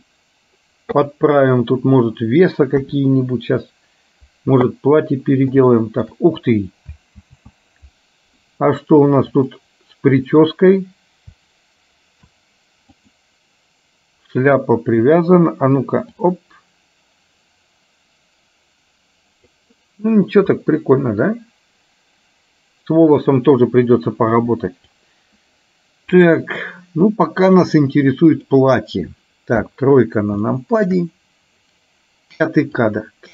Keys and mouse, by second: 2.8 KP_1, 5.7 shift+middle click, 7.3 ctrl+z, 9.5 click, 16.5-19.7 drag, 20.7-23.3 middle drag, 25.0 click, 26.3 click, 27.5-28.7 drag, 29.7 KP_3, 30.5 middle click, 33.0-33.3 drag.